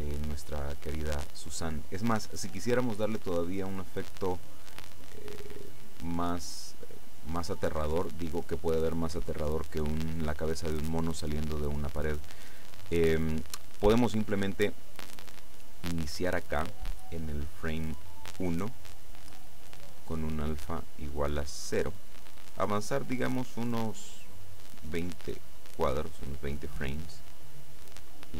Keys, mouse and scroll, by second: 6.5-7.7 scroll down 3, 7.9-8.3 scroll up 1, 20.3-22.3 drag, 24.9-26.6 drag.